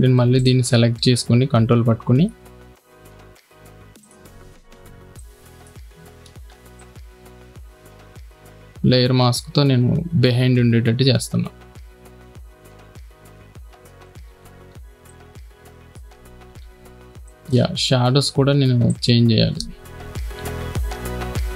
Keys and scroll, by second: 9.5 x, 14.6 space, 16.5 v, 17.1 space, 20.8 shift+Left.